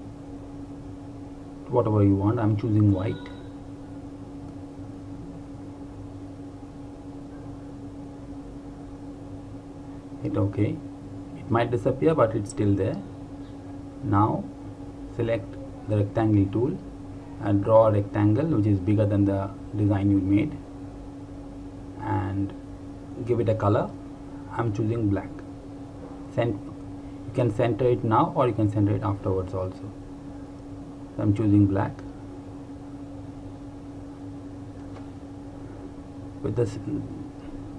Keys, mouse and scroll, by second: 1.7 click, 14.9 click, 19.0 click, 26.6 click, 33.2 click, 36.8 right click.